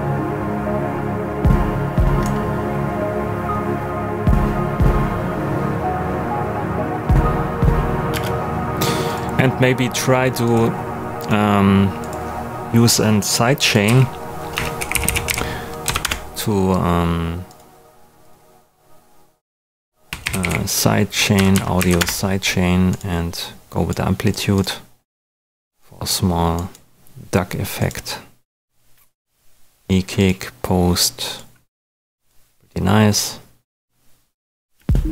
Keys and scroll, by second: 8.1 space, 13.8-15.7 typing, 15.8 Down, 16.0 Return, 19.8-20.9 typing, 21.3 Down, 21.7 Up, 21.9 Return, 34.7 space.